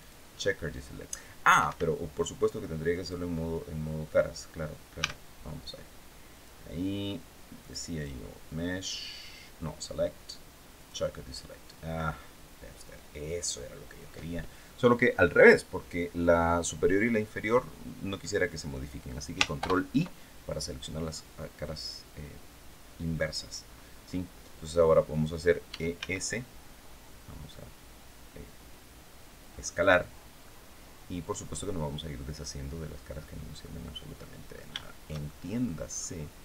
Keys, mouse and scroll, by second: 1.2 Escape, 2.7 click, 4.7 a, 6.0 click, 7.3 click, 7.6 click, 10.4 click, 19.3 ctrl+i, 25.4 e, 25.6 s, 29.5 click, 30.1-34.4 middle drag, 34.5-35.5 shift+middle drag.